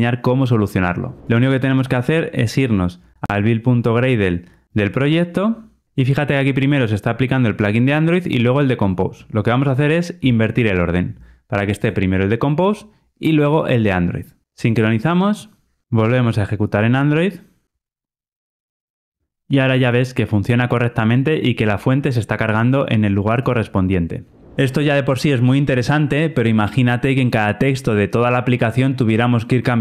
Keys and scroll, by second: 10.1 alt+shift+Up, 16.0 ctrl+r.